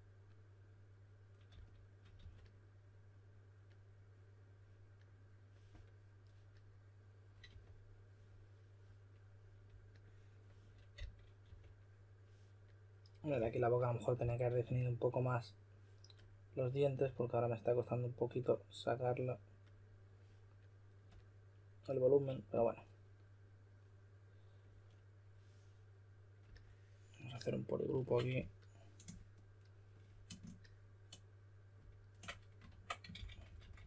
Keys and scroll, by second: 1.4-2.1 typing, 7.4 typing, 10.9-11.4 typing, 13.3-14.6 typing, 32.6 super+w, 32.8-33.8 typing.